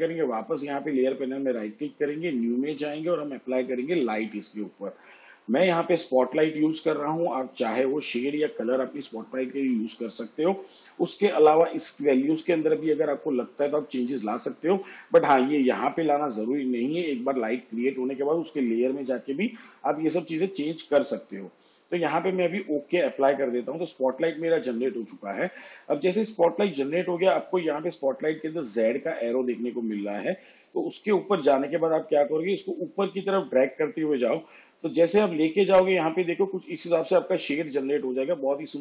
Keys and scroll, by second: 26.8 v.